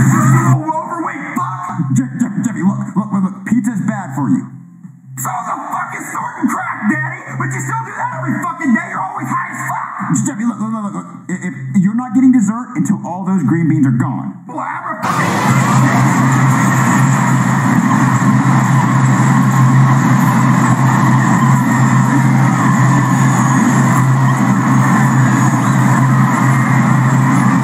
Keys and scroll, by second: 2.5 space, 15.0 space, 15.5 space.